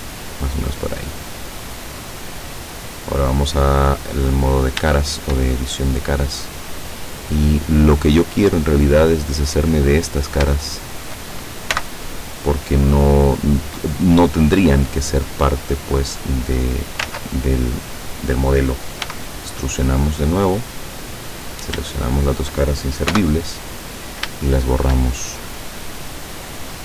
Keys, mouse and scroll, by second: 0.1 click, 0.5-2.9 middle drag, 4.2 click, 5.1 shift+middle click, 5.7-8.2 shift+middle drag, 8.4 middle click, 9.4 right click, 9.8 middle click, 10.8 shift+right click, 11.8 x, 12.9 click, 14.8 right click, 16.6 click, 17.2 ctrl+z, 19.1 e, 20.4 click, 21.4 right click, 22.2 shift+right click, 23.2 x, 23.8 click, 24.5 shift+middle click, 25.1-26.8 shift+middle drag.